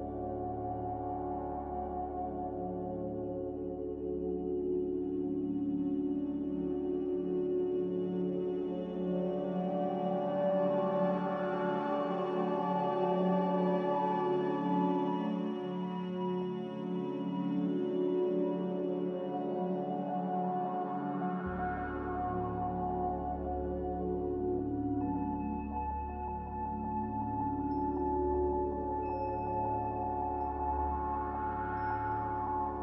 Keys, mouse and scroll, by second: 1.9 click, 2.6 b, 3.8 Delete, 4.4 click, 8.2 b, 12.9 Delete, 17.5 n, 29.2 b.